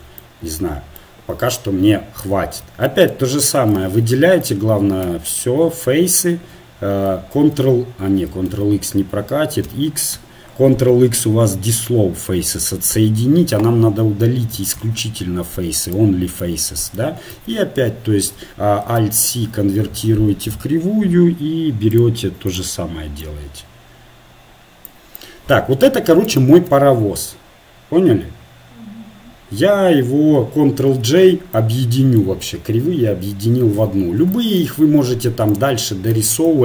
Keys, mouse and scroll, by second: 2.2 Tab, 2.6 Tab, 4.5 ctrl+Tab, 5.5 a, 7.3 ctrl+x, 8.4 ctrl+z, 15.9 x, 17.3 Tab, 20.5 alt+c, 22.6-26.3 drag, 26.3-30.9 right drag, 30.9 ctrl+j, 33.8 Tab, 36.5 KP_1.